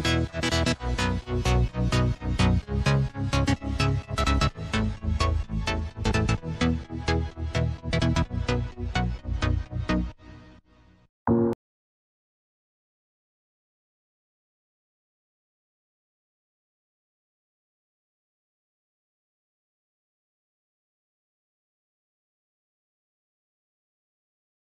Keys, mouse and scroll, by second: 1.8 click, 3.1 click, 4.3 click, 4.7 scroll down 2, 5.6 click, 6.7 click, 8.0 KP_1, 9.0 click, 10.2 click, 12.3 shift+click, 13.4 drag, 13.9 click, 14.4 click, 16.1 click, 19.5 click, 20.9 shift+click, 21.7 click.